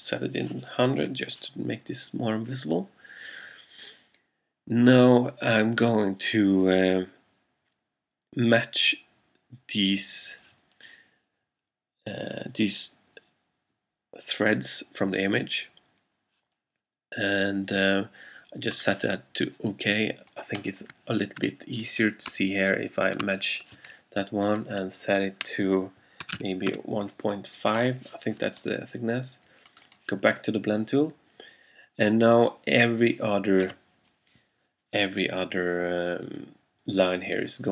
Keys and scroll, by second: 0.0-0.1 typing, 26.1-27.3 typing.